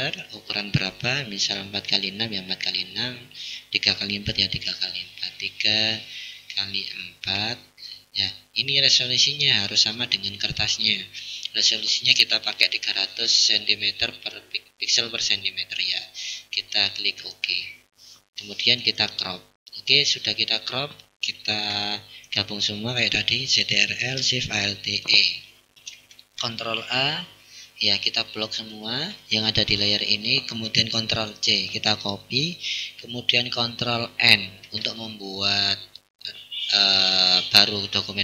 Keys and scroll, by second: 23.6 ctrl+alt+shift+e, 26.4 ctrl+a, 31.1 ctrl+c, 33.5 ctrl+n.